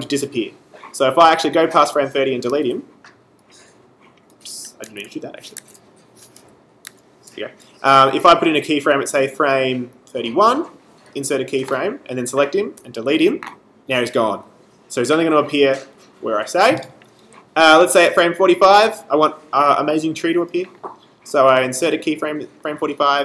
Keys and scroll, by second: 2.6 BackSpace, 4.8 z, 5.5 super+z, 12.8 BackSpace.